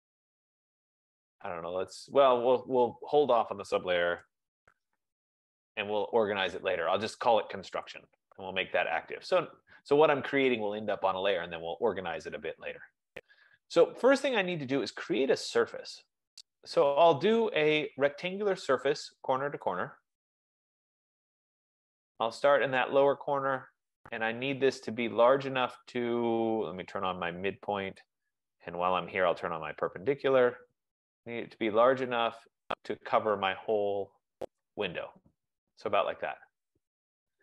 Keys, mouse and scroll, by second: 5.4 click, 5.4-6.3 typing, 9.0 click, 9.6 typing, 12.0 click, 12.9 click, 16.5-17.9 drag, 20.0 click, 22.2 click, 28.4 click, 30.0 click, 35.1 click, 35.9 F15.